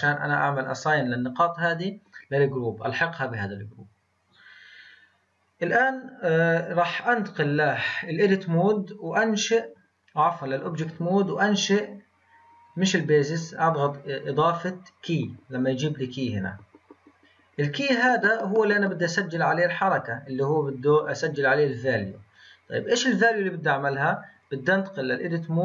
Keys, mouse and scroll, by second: 7.0-10.1 drag, 10.2-15.6 drag, 19.8-23.0 drag, 24.3-25.6 drag.